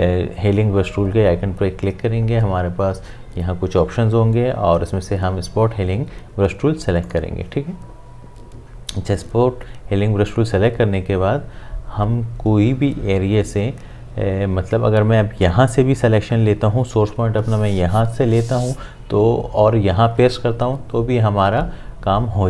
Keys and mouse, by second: 7.0 click.